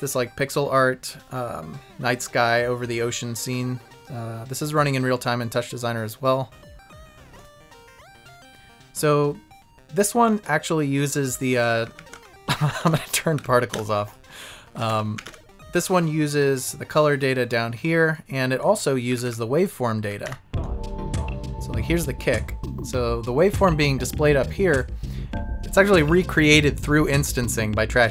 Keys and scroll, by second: 11.0 Left, 11.5 Up, 12.1 Right, 12.7 Left, 12.8 Down, 12.8 Right, 13.3 Up, 13.7 Right, 14.7 Left, 14.8 Down, 14.8 Right, 15.1 Up, 15.1 Left, 15.2 Right, 19.1 Up, 20.0 Up.